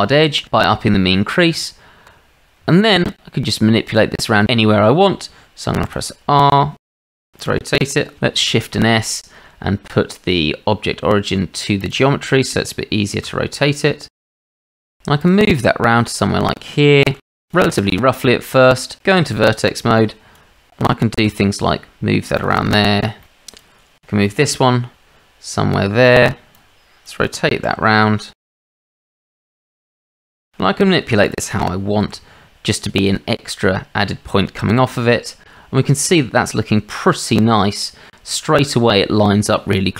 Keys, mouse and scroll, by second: 1.5 Tab, 2.7 shift+drag, 3.9 click, 5.9 r, 8.4 shift+s, 13.2 r, 15.4 g, 16.0 shift+drag, 18.1 Tab, 19.2 shift+z, 20.0 click, 21.2 r, 23.2 click, 24.5 g, 26.7 click, 29.2 click, 29.5 g, 30.0 click, 31.5 g, 32.0 r, 34.7 shift+z, 35.9-37.3 drag.